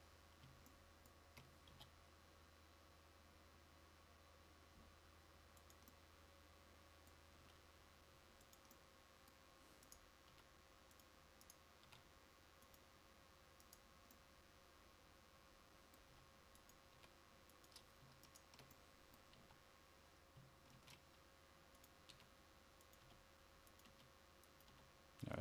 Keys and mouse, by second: 0.0 z, 1.8 g, 6.5-7.2 middle drag, 7.5 g, 11.9 r, 16.4 g, 19.5 KP_7, 20.9 shift+d, 22.3 r, 23.1 g.